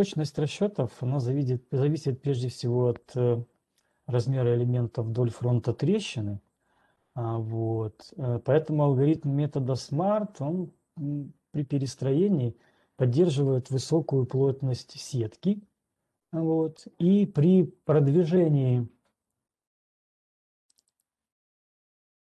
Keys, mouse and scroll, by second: 19.6-20.2 scroll, 20.2 ctrl+2, 21.2 right click.